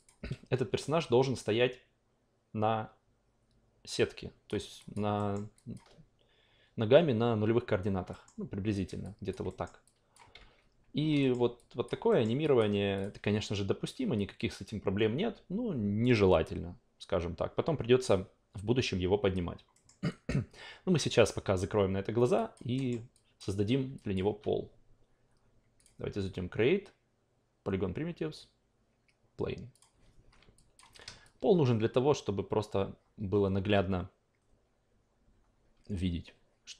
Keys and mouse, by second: 0.5 w, 1.4-4.5 drag, 4.8 alt+drag, 5.2 alt+middle drag, 5.5 alt+drag, 8.2-8.7 alt+middle drag, 8.7 alt+right click, 9.0 alt+click, 9.5 alt+middle click, 9.8 alt+click, 10.3 ctrl+z, 11.2 alt+middle click, 11.5 alt+click, 12.1 alt+middle drag, 12.4-13.0 alt+drag, 19.7 alt+middle drag, 20.1 alt+right drag, 22.3 alt+drag, 22.7 alt+middle drag, 23.4-23.9 alt+drag, 24.1 alt+click, 25.8 click, 29.7 click, 30.5 alt+click, 31.2-36.7 shift+drag.